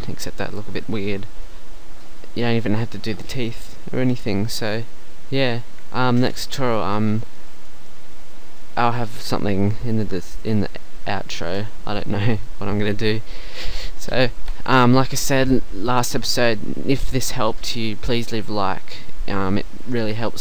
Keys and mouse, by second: 6.7-7.9 middle drag.